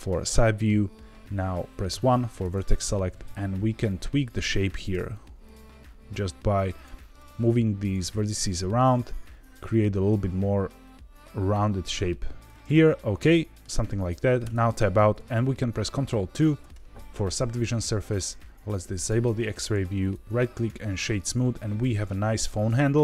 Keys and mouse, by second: 1.8 1, 2.5 click, 3.0 g, 3.0 z, 3.8 click, 4.5 click, 4.9 g, 6.7 click, 7.1 click, 8.0 g, 12.4 click, 12.7 middle click, 14.4 Tab, 16.3 ctrl+2, 19.0 click, 20.0 right click, 21.4-23.0 middle drag.